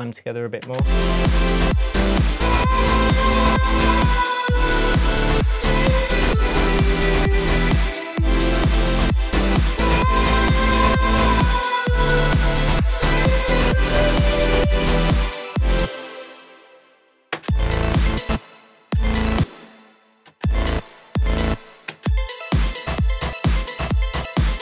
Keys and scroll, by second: 0.7 space, 15.7 space, 17.4 space, 18.8 space.